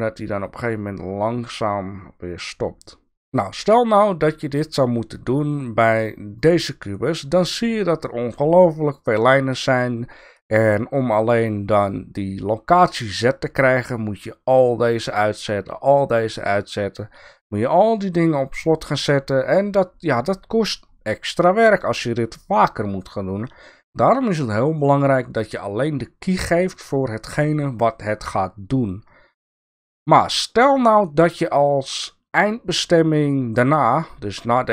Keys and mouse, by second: 1.9-3.2 drag, 6.3 click, 9.1 click, 13.9-15.1 drag, 15.7-16.2 drag, 17.2-18.4 drag, 18.9-19.3 drag.